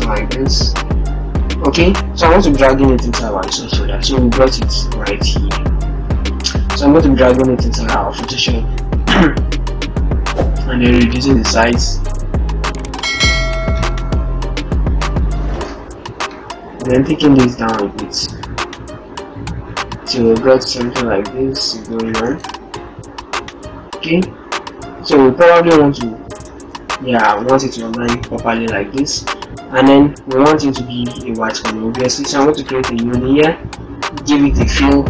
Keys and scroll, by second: 22.1 ctrl+t, 32.1 ctrl+shift+n.